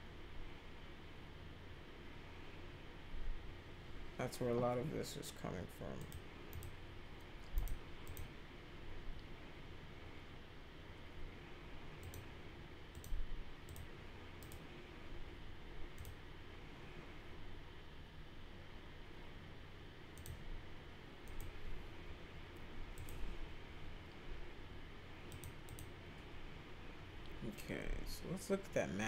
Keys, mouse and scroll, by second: 6.0 click, 6.5 click, 7.5 click, 8.0 click, 12.0 click, 12.9 click, 13.6 click, 14.4 right click, 15.9 click, 20.1 click, 21.2 click, 22.9 click, 25.3 click, 25.6 click.